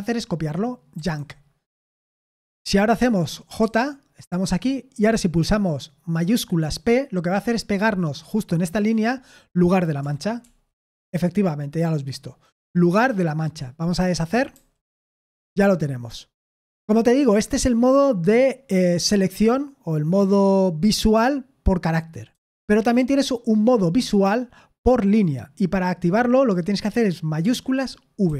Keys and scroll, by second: 0.9 y, 3.6 j, 10.4 shift+p, 14.5 u, 22.3 typing, 28.2 shift+v.